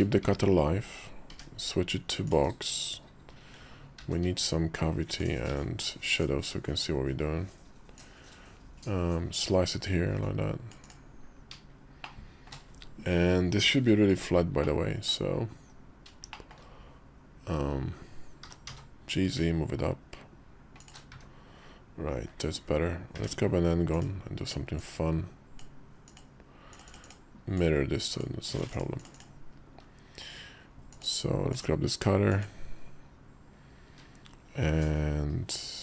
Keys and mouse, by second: 0.1 `, 1.1 d, 3.7 alt+v, 5.3 alt+v, 7.7-10.7 drag, 11.8 shift+middle click, 14.4 middle click, 15.4 KP_5, 16.1 shift+middle click, 18.2 g, 20.9 `, 22.0 KP_5, 22.9 d, 24.5 click, 27.3 click, 28.9 click, 30.7 click, 31.3 click, 32.1 click, 33.7 q.